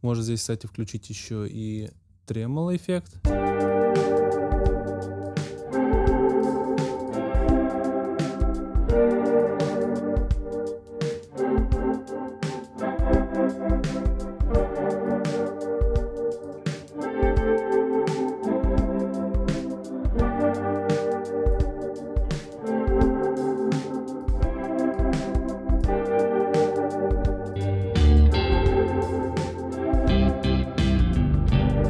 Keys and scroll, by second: 3.0 space.